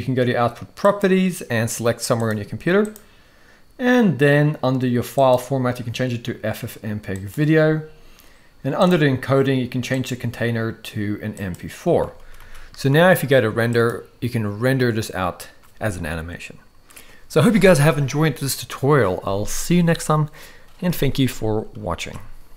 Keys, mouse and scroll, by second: 0.8 click, 5.3-7.3 drag, 8.8 click, 10.0-11.5 drag, 12.2 ctrl+s, 12.5 ctrl+s, 13.8-16.9 drag, 21.9 ctrl+s.